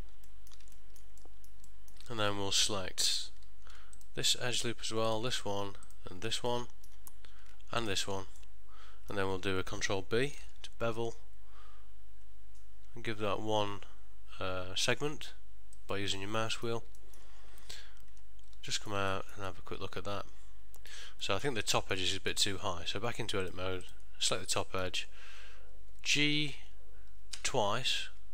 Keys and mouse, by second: 0.4 ctrl+middle click, 0.8 shift+middle click, 1.3 middle click, 1.8 ctrl+middle click, 4.1 alt+shift+click, 6.6 middle click, 7.9 alt+shift+click, 8.5 middle click, 10.5 ctrl+b, 16.5 middle click, 17.1 ctrl+middle click, 18.2 Tab, 18.8 ctrl+middle click, 19.2 shift+middle click, 19.6 middle click, 21.4 middle click, 21.9 ctrl+middle click, 22.2 ctrl+middle click, 22.7 Tab, 23.6 click, 24.0 alt+click, 24.4 middle click, 26.3 g.